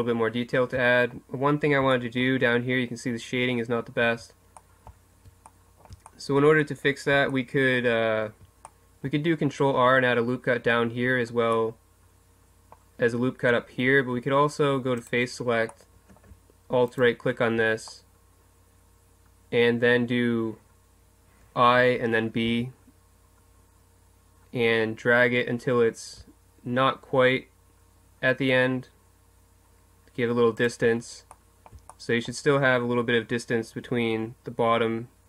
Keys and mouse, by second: 0.9-3.8 middle drag, 4.1 Tab, 4.6 middle click, 11.2 middle click, 15.0 click, 19.2 middle click, 21.7 i, 31.3-32.5 middle drag.